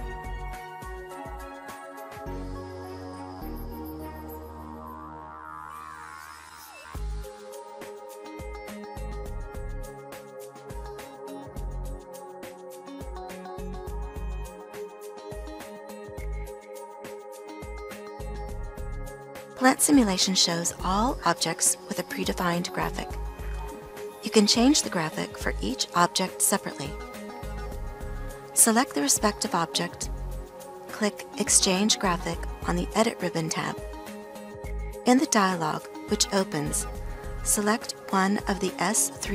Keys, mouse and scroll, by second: 6.1-13.1 ctrl+middle drag.